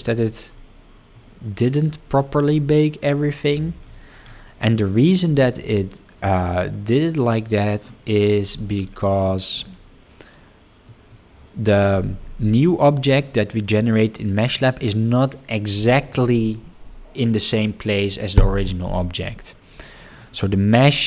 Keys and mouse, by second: 4.7 middle click, 10.8 click, 14.4 click.